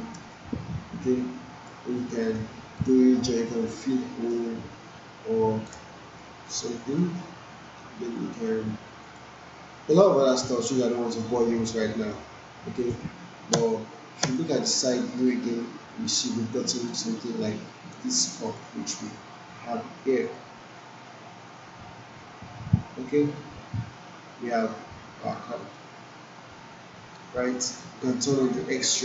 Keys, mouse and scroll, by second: 0.3-1.8 alt+drag, 2.8-3.4 shift+right drag, 6.4-7.3 alt+click, 7.0 alt+middle click, 9.1 click, 10.5-11.5 alt+click, 11.6-13.1 alt+drag, 13.5 space, 15.1 alt+middle click, 16.9 right click, 18.1 click, 18.9 w, 20.1-27.8 drag.